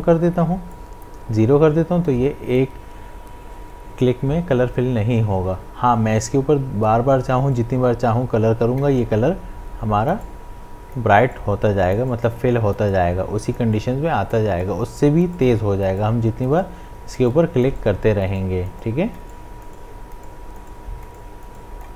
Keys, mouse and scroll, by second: 7.6-21.2 drag.